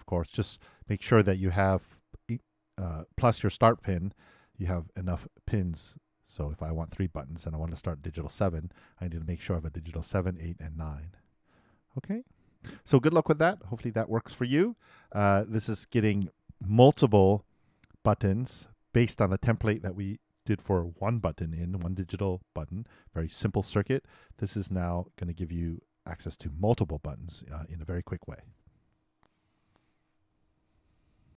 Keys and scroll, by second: 29.5 super+s.